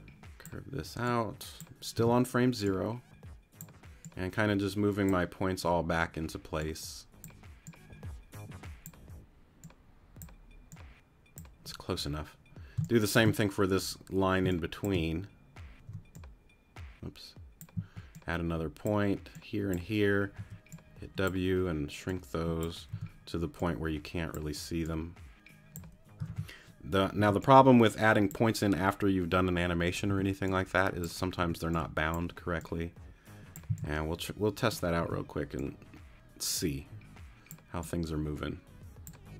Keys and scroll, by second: 1.9 t, 12.7 space, 14.4 space, 15.9 t, 17.7 a, 20.4 w, 22.9 t, 26.3 super+z, 27.2 super+t, 30.1 t, 31.4 t, 33.7 c, 35.0 t.